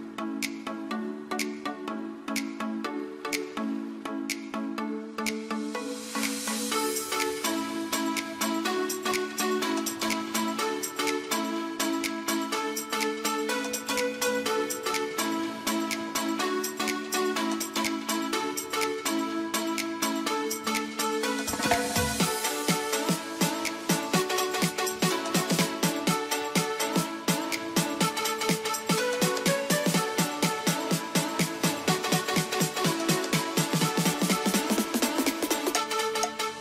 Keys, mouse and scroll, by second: 4.4 ctrl+v, 5.2 F3, 5.8 F2, 6.0-7.8 drag, 7.8 F2, 8.2 click, 10.5 ctrl+r, 10.9 click, 11.5 ctrl+z, 11.6-16.7 drag, 19.5 click, 21.1 F3, 22.4 ctrl+click, 24.0 F2, 24.2 click, 26.8 F3, 27.2 F2, 27.3-34.3 drag, 34.6 F3, 35.0 click, 36.3 r, 36.5 click.